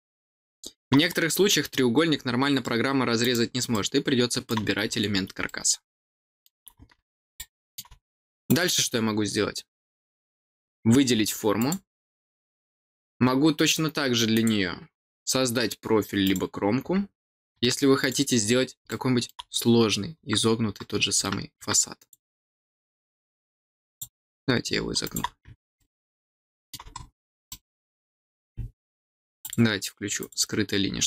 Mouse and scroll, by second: 1.0 scroll down 2, 1.3 scroll up 2, 2.0 scroll up 2, 3.1 click, 3.6 middle click, 4.8-5.1 scroll down 2, 5.4 middle click, 7.3 middle click, 8.4 click, 11.5 click, 14.3 click, 16.2 click, 17.9 click, 18.8 middle click, 21.9 click, 23.1 click, 25.0 click, 25.7 middle click, 26.9 middle click, 27.4 middle click, 29.3 click, 30.1 click.